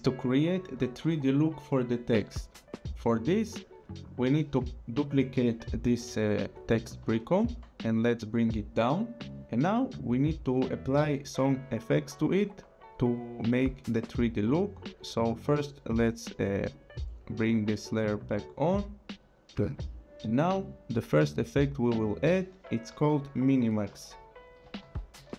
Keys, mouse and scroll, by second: 4.0 click, 7.0 ctrl+d, 8.0 click, 16.7 click, 21.4 click, 23.6-25.3 typing.